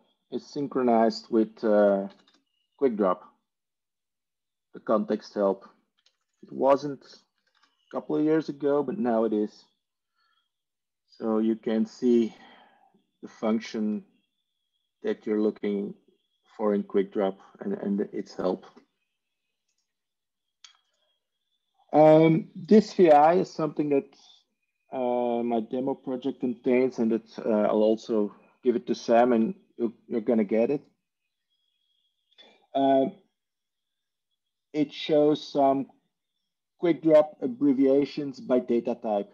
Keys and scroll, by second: 1.7-2.7 typing, 5.8-7.5 typing.